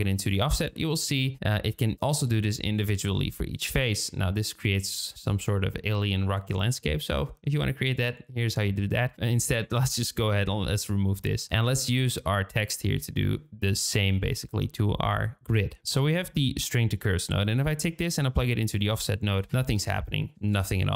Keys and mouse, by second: 3.6-4.4 middle drag, 4.4 click, 4.6 middle click, 5.0 click, 5.0 middle click, 6.9-7.3 middle drag, 7.3 click, 11.3 Delete, 17.4-18.7 drag.